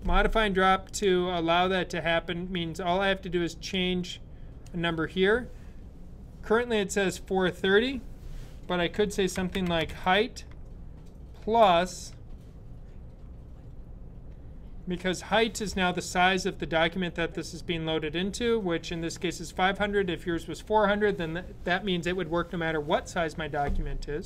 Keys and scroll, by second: 8.8-10.1 typing, 11.2 typing.